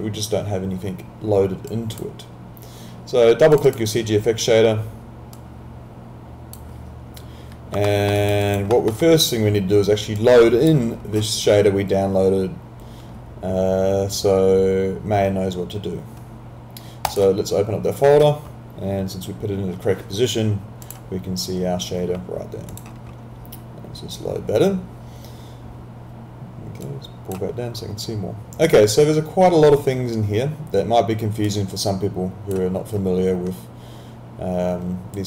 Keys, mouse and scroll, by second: 7.9 alt+middle click, 8.2 alt+right click, 8.4 alt+click, 8.7 alt+middle click, 10.2 click, 17.1 click, 20.9 click, 26.9 click, 31.5 click.